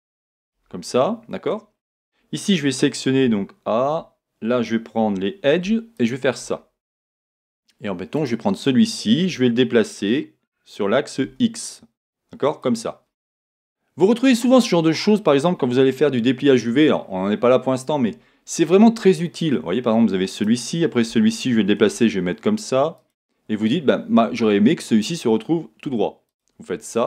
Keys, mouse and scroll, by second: 1.2 middle click, 1.7-2.4 scroll up 1, 2.4-3.2 scroll down 1, 3.2 a, 5.0 middle click, 5.0 2, 5.9 alt+click, 6.1-8.2 middle drag, 8.2 click, 9.3 g, 12.7 click, 13.5 middle click, 14.4-20.3 middle drag, 14.9-15.3 scroll down 1, 16.2 shift+scroll up 1, 17.0-20.3 shift+scroll down 1, 20.3 scroll up 1, 20.3 click, 21.1 g, 23.1 click, 26.3 alt+click.